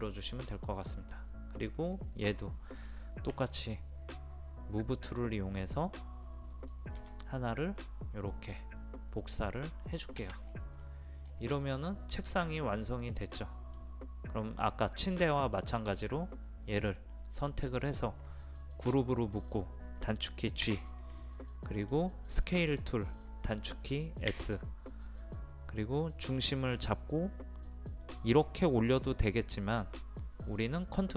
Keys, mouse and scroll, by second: 1.6 click, 1.9 scroll down 1, 2.1-3.4 scroll up 1, 3.4 m, 6.6 click, 9.9 click, 10.5-10.9 scroll down 1, 10.9 middle click, 11.3 scroll down 1, 11.7 middle click, 12.2-12.5 scroll down 1, 12.5 middle click, 12.8-13.4 scroll down 1, 13.4-14.7 middle drag, 16.2-17.7 drag, 20.7 a, 21.3-22.6 middle drag, 24.4 s, 28.1 click.